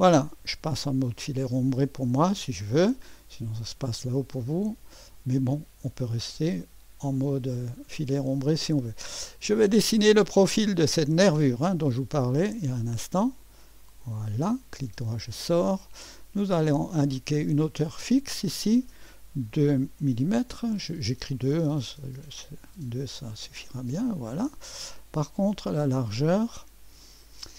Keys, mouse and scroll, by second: 2.2 2, 5.0-5.3 scroll up 1, 6.2-6.6 scroll up 1, 9.8 click, 12.4 click, 14.0 click, 14.8 middle click, 16.4 click, 17.8 click, 19.4-20.4 typing, 20.4 Return, 23.4-24.4 drag, 27.2 click.